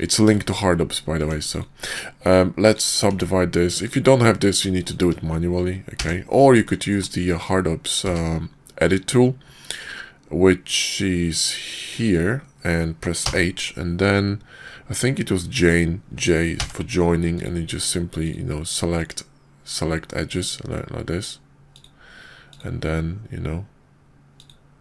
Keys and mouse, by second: 0.4 shift+click, 1.1 Tab, 1.4 click, 1.9-2.7 drag, 3.1 Tab, 3.8 click, 4.7 shift+click, 5.9 j, 6.5 click, 7.2 click, 8.0 q.